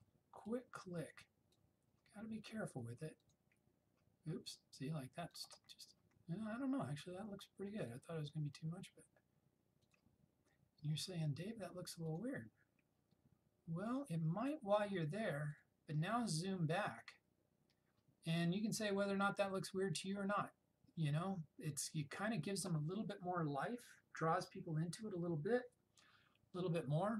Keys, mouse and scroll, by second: 2.7 ], 3.2 click, 7.9 click, 12.7 click, 15.6 click.